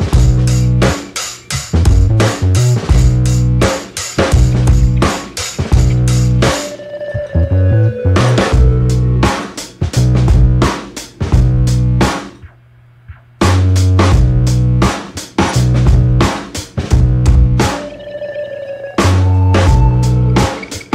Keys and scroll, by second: 18.0 space.